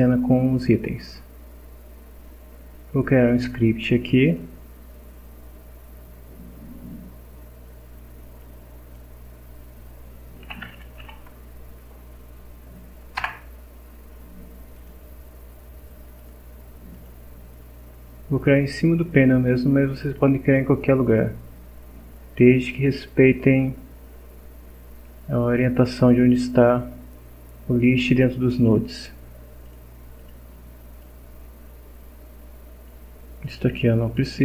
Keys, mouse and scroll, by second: 4.3 click, 8.4 click, 10.2-11.5 typing, 13.2 Return, 14.7 click, 16.2 click, 16.9 click, 29.7 click, 30.2 click, 31.0-33.1 drag, 33.7 Delete.